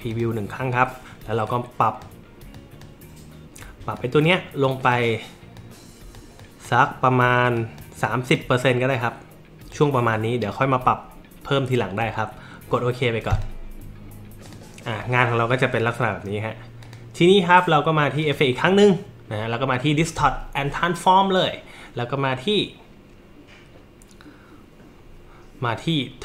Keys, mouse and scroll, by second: 0.1 click, 1.5 click, 2.5 click, 3.9 click, 4.6 click, 5.6 click, 6.4 click, 7.6 click, 8.1 click, 8.9 click, 13.3 click, 14.5 click, 16.8 click, 18.2 click.